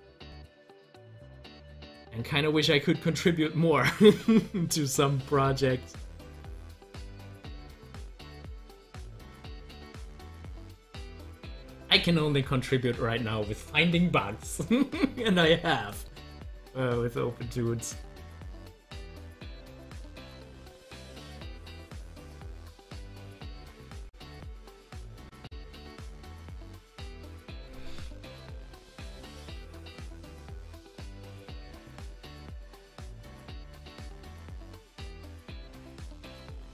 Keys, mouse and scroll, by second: 4.8 Delete, 5.8-8.4 drag, 8.7 click, 10.2 scroll down 1, 11.3-14.2 middle drag, 15.3 scroll up 1, 15.9-17.8 middle drag, 17.8 click, 17.9 double click, 18.6 scroll up 1, 21.0 click, 21.7 scroll down 1, 22.1 scroll up 1, 22.5 scroll down 1, 24.9-26.4 drag, 26.4 ctrl+z, 35.9 click.